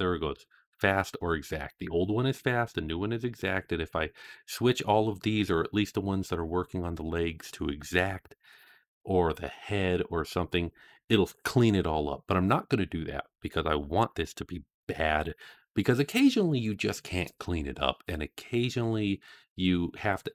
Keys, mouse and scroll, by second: 3.9 click.